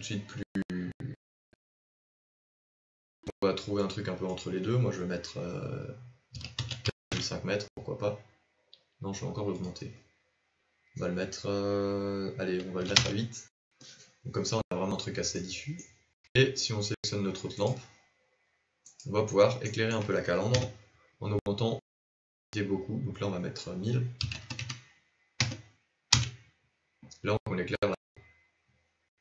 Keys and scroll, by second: 21.1 KP_0.